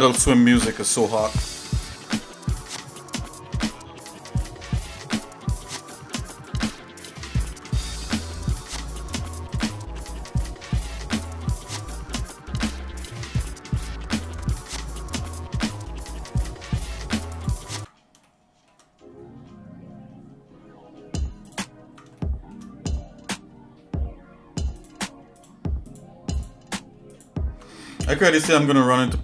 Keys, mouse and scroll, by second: 0.3 shift+middle click, 0.9 middle click, 1.9 shift+middle click, 2.5 middle click, 3.4-3.9 scroll up 2, 6.3 ctrl+click, 7.5 ctrl+z, 8.1 shift+click, 8.7 ctrl+shift+click, 9.5 ctrl+click, 10.1 middle click, 11.1 ctrl+click, 11.6 shift+middle click, 12.2 scroll down 2, 12.7 middle click, 13.2 scroll up 2, 14.1 ctrl+click, 14.7 scroll down 2, 15.2 shift+middle click, 15.7 shift+click, 16.6 scroll up 1, 17.3 ctrl+click, 18.2 shift+middle click, 21.6 ctrl+click, 22.2 shift+middle click, 24.7 ctrl+click, 25.9 ctrl+click, 26.3 ctrl+click, 27.3 ctrl+click, 27.8 shift+middle click, 28.9 shift+middle click.